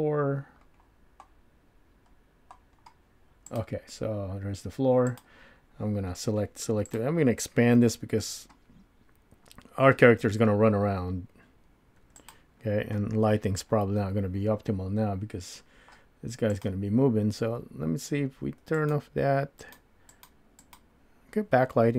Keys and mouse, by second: 3.5 click, 5.1-7.0 drag, 7.8 s, 18.8 click, 19.6 click, 20.2 click, 20.7 click.